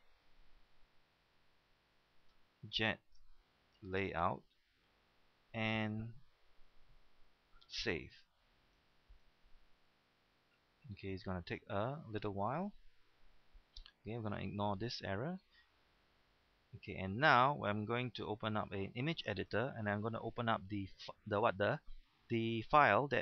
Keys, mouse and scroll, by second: 2.6-5.2 typing, 8.3-20.0 drag, 8.3 ..